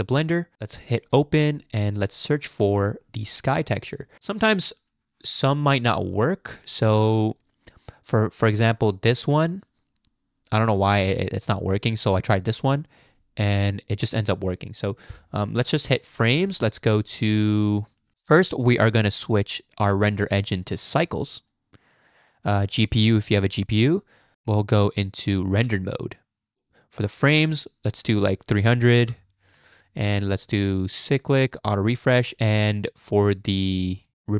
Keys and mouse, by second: 14.9 click, 16.2-18.1 drag, 18.6 Tab, 19.8 click, 20.4-21.2 drag, 22.1-23.5 drag, 24.1 click, 25.4 z, 27.3-29.0 drag, 28.7 0, 31.0 click, 31.6 click, 33.9-34.3 drag.